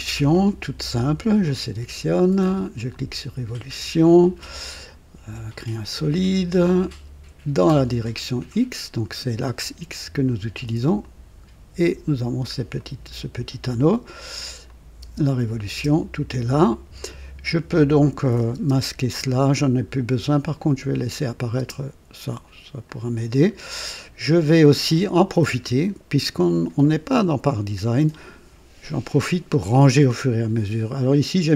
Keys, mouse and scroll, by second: 2.9 click, 8.3 click, 11.0 click, 12.1-12.4 scroll down 1, 12.8-13.5 right drag, 14.6 click, 15.0-15.7 typing, 18.0 click, 18.5 typing, 20.6 click, 21.3 click, 21.6 space, 22.8 click, 23.6 scroll down 1, 24.0 right click.